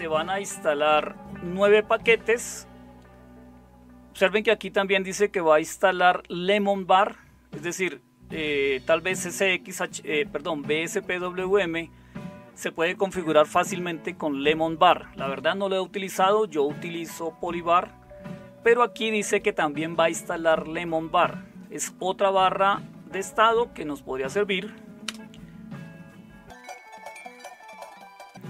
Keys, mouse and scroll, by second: 25.0 Return.